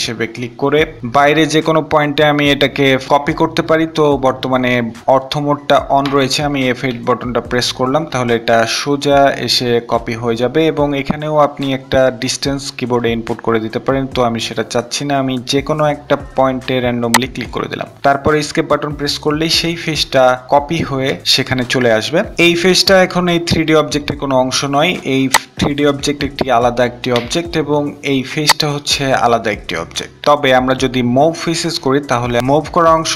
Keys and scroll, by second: 6.6 F8, 18.0 Escape, 26.2 Escape, 29.9 Escape.